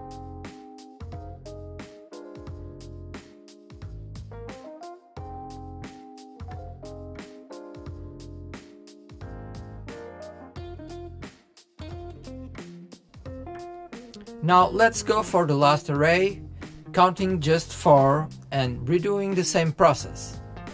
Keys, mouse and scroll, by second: 4.9 KP_1, 7.3 click, 8.4 click, 9.8 click, 10.1-10.7 middle drag, 10.7 click, 11.5 click, 11.8-12.5 middle drag, 12.5 KP_3, 12.9 scroll up 3, 13.1-14.2 shift+middle drag, 14.2 shift+d, 16.5 click, 20.4 g.